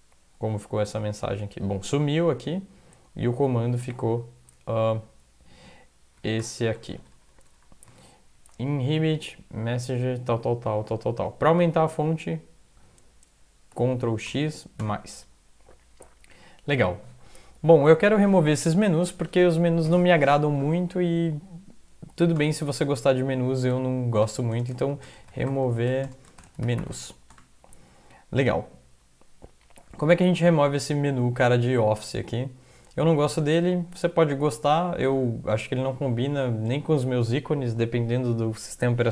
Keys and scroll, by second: 0.8 super+Up, 3.8 ctrl++, 4.0 ctrl++, 6.2 ctrl+x, 6.4 ctrl+=, 6.6 ctrl+=, 6.8 ctrl+=, 6.9 ctrl+=, 8.4 Down, 8.7 End, 11.1 Down, 14.3 ctrl+x, 14.8 ctrl+=, 22.4 Return, 23.7-27.4 typing.